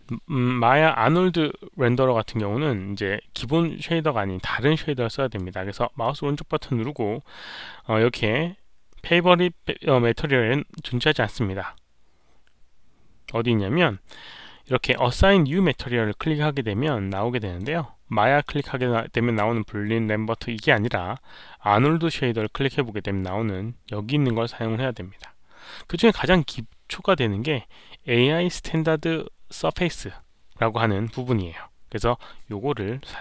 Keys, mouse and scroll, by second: 3.8 alt+right click, 5.9-15.4 right drag, 17.1 click, 18.4 click, 22.3 click, 28.0 click.